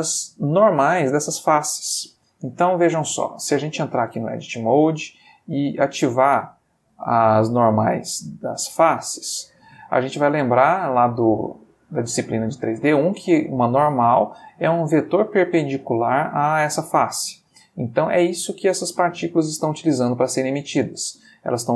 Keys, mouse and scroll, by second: 1.2-2.6 middle drag, 2.7 Escape, 3.9 Tab, 5.6 click, 7.4 click, 8.9 click, 10.0-12.2 middle drag, 13.6 middle click, 17.2 middle click, 20.0-21.1 middle drag.